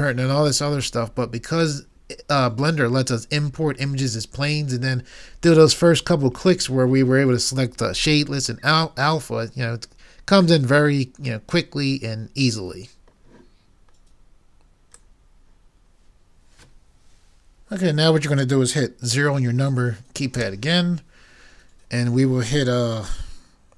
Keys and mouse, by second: 2.5-3.9 middle drag, 10.8 middle click, 20.4 KP_0.